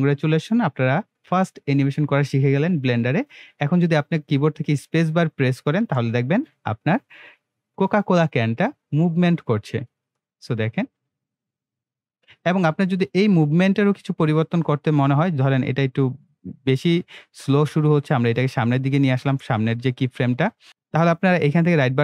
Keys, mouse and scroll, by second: 5.8 space, 12.8 space, 15.2-20.7 drag, 21.4 right click.